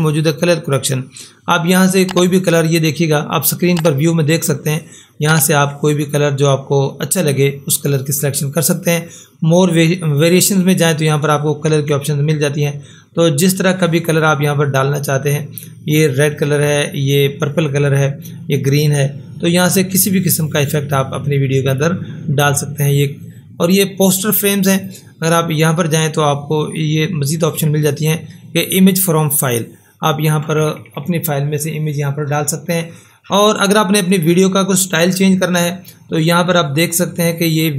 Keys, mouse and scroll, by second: 21.7 click, 24.7 click.